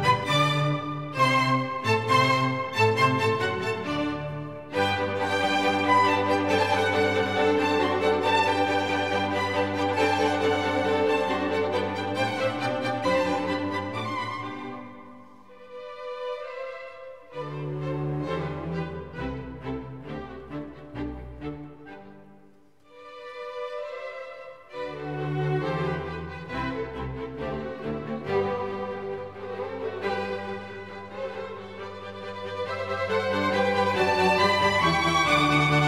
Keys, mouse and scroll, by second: 4.5-6.7 drag, 7.4-9.3 drag, 10.2-13.3 drag, 13.7 shift+space, 16.3 shift+z, 23.5-25.2 right drag, 26.4-28.3 right drag, 29.7-31.8 drag, 34.1-35.6 drag, 35.6 right click, 35.8 right click.